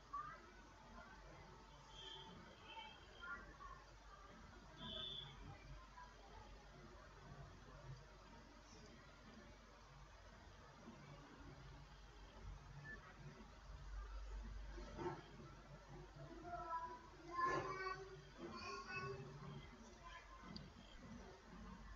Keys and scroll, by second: 0.0-2.0 typing, 2.2 Return, 3.5 F9, 9.7 ctrl+v, 19.0 ctrl+c.